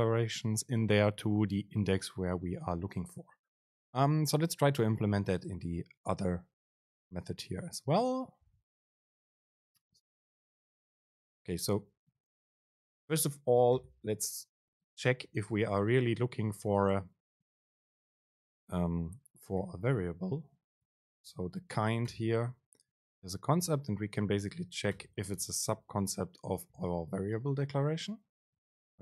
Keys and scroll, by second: 11.1 BackSpace, 11.9 BackSpace, 12.4 super+space, 20.5 super+space, 28.6 Down.